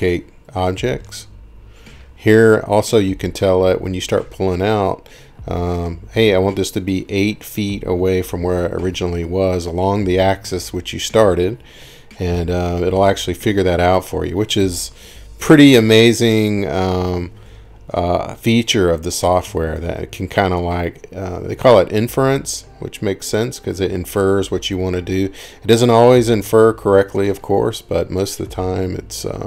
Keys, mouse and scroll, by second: 0.0-0.7 typing, 1.2 Return, 3.5-3.9 scroll, 5.6 scroll, 6.2-6.9 scroll, 8.9 scroll, 9.0-9.3 scroll down 9, 11.3 middle click, 11.7-12.2 scroll up 8, 12.7 scroll up 1, 12.8-13.1 scroll down 1, 14.1 click, 15.5 click, 17.9 Escape, 18.8 scroll, 20.3 scroll up 2, 20.5 middle click, 21.9 middle click, 23.1 scroll, 24.6 scroll, 25.9-26.4 scroll, 28.8-29.4 scroll.